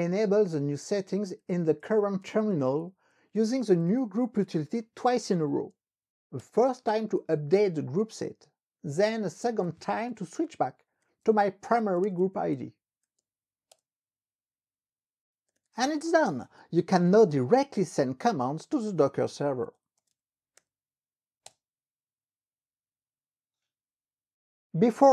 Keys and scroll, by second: 1.3-6.3 typing, 6.4 Return, 9.2-13.8 typing, 11.4 Tab, 13.8 Return, 15.4-21.2 typing, 21.6 Return.